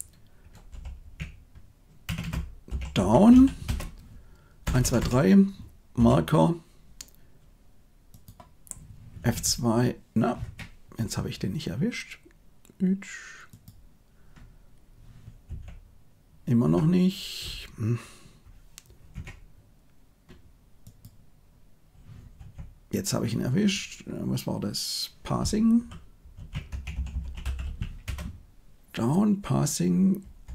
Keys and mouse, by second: 2.1 BackSpace, 4.6 Right, 4.8 Right, 4.9 Right, 5.9 m, 8.1 click, 9.1 F2, 13.4 click, 15.4 F2, 20.8 click, 22.3 F2, 27.0 s, 30.4 Right.